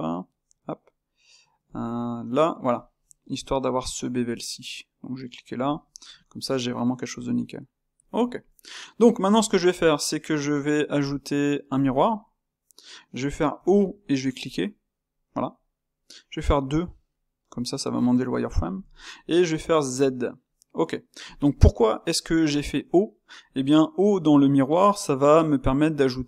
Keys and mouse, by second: 3.1-5.1 ctrl+middle drag, 5.1 click, 5.8-7.9 ctrl+middle drag, 7.9 click, 8.9 click, 9.3-11.9 ctrl+shift+middle drag, 11.9 space, 14.4 click, 15.2-21.3 middle drag, 21.5-24.1 middle drag, 24.1-26.2 drag.